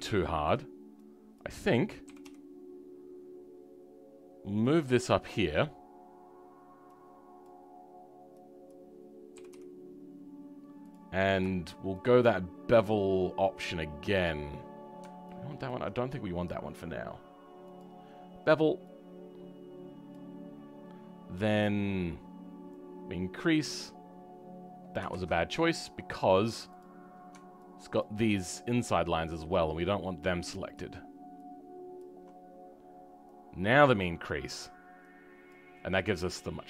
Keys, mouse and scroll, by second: 0.0 shift+middle click, 1.3 click, 2.0 g, 11.0-12.6 scroll up 2, 12.6 click, 14.2-15.6 scroll up 3, 15.6 ctrl+click, 25.0 ctrl+z, 26.7 click.